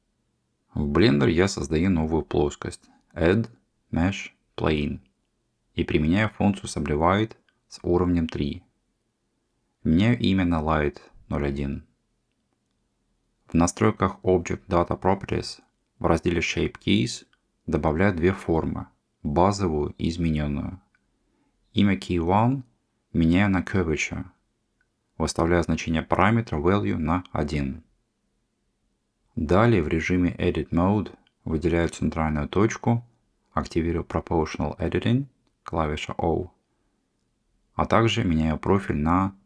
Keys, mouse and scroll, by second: 1.3 shift+a, 4.2 Tab, 4.7 click, 6.7 click, 7.2 click, 8.8 Tab, 10.1-11.5 drag, 15.9 click, 17.4 click, 17.6-26.0 drag, 26.6-27.7 drag, 29.8 Tab, 31.4 click, 33.6 click, 34.5-38.2 drag.